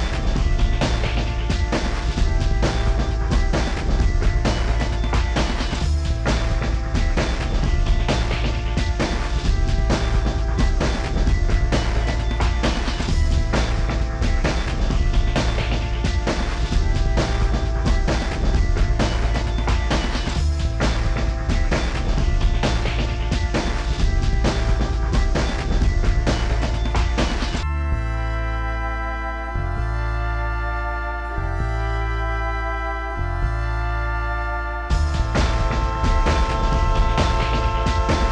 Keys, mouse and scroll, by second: 0.1 middle click, 0.4 scroll down 24, 0.6 s, 1.8 scroll down 6, 1.9 middle click, 2.0 m, 2.3 space, 2.4 m, 3.2 shift+click, 3.3 space, 3.3 scroll down 2, 3.4 shift+middle click, 3.4-4.5 scroll up 25, 4.0 shift+click, 4.5 shift+click, 4.6-5.3 scroll down 55, 4.9 space, 5.4 j, 5.8 middle click, 5.8 middle click, 6.0 scroll up 20, 6.4 Escape, 6.7 double click, 6.8 Escape, 7.0 double click, 7.2 double click, 7.3 middle click, 7.3 scroll down 6, 7.6-9.2 typing, 7.7 shift+middle click, 9.0-9.4 scroll up 22, 9.4 scroll down 10, 9.7 shift+scroll up 12, 10.0 shift+click, 10.2 scroll down 14, 10.2 middle click, 10.7 shift+click, 10.8 shift+middle click, 10.9 scroll up 22, 11.3 shift+click, 11.4 middle click, 11.5 scroll down 20, 11.7 shift+middle click, 11.9 shift+click, 12.0 scroll up 14, 12.1 middle click, 12.6 Up, 12.7 scroll down 44, 13.1 shift+middle click, 13.2 scroll up 4, 13.3 middle click, 13.5 scroll down 18, 13.6 middle click, 14.1 scroll down 7, 14.2 middle click, 14.2 middle click, 14.3-14.8 scroll up 19, 14.5 middle click, 14.8 m, 15.0 ctrl+click, 15.2 scroll down 7, 15.5 shift+middle click, 15.7 middle click, 15.8 scroll up 1, 19.1 scroll down 11, 19.4 middle click, 30.5 middle click, 30.6 middle click, 30.7 scroll up 18, 31.0 middle click, 31.1-31.7 scroll down 29, 31.8 middle click, 32.0 middle click.